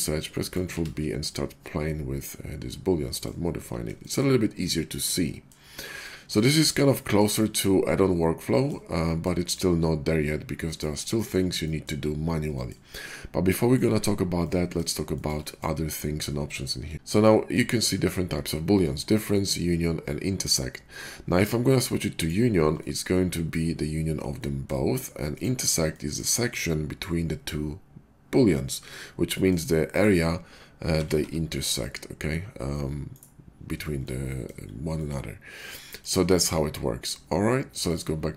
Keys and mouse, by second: 0.6 Tab, 2.4-7.1 middle drag, 7.2-8.3 middle drag, 8.3-9.9 drag, 9.9-16.9 middle drag, 16.9 click, 17.5 shift+click, 17.7 shift+middle click, 22.2-25.3 middle drag, 25.4-29.9 middle drag, 29.9-30.8 drag, 30.8-37.8 middle drag, 30.8 g, 37.9-38.3 middle drag.